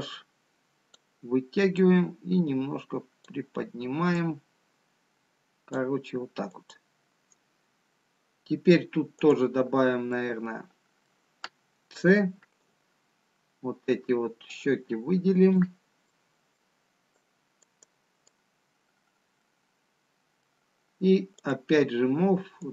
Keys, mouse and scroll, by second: 3.1 click, 5.5 click, 6.7 click, 11.0 click, 11.0 middle click, 12.9 c, 19.6 right click, 19.6 middle click.